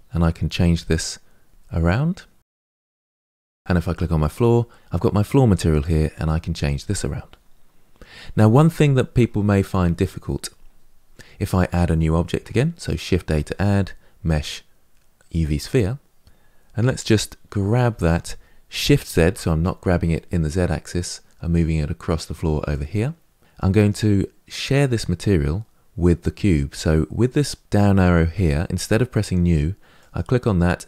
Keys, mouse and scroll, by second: 1.4 click, 2.1 drag, 4.0 click, 6.3 click, 15.2 shift+a, 17.7 g.